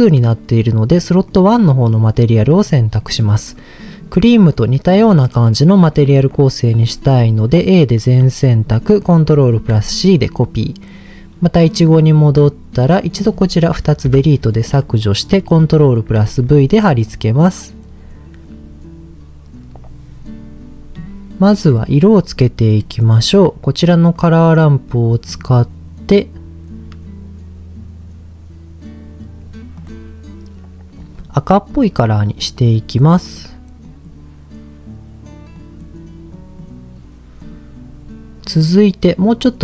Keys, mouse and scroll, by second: 0.0-2.1 drag, 2.2 click, 2.6-3.0 scroll down 2, 3.0 middle click, 3.8 click, 6.8 a, 9.3 ctrl+c, 11.6 click, 12.9 drag, 14.0 Delete, 16.1 ctrl+v, 22.1-22.8 scroll up 2, 22.8 middle click, 23.0-23.6 scroll up 2, 23.6 scroll up 1, 24.1 click, 25.3 click, 31.7 click, 32.1 click, 32.5 click, 37.4 click.